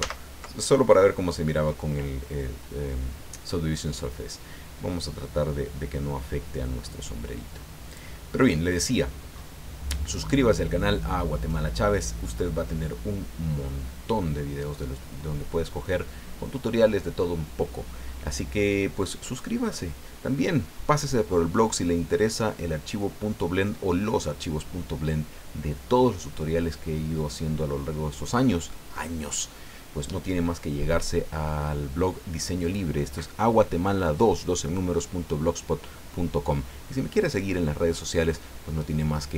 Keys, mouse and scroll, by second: 0.0 ctrl+z, 7.9 click, 8.7 scroll down 2, 9.4 scroll up 2, 10.2-16.0 middle drag.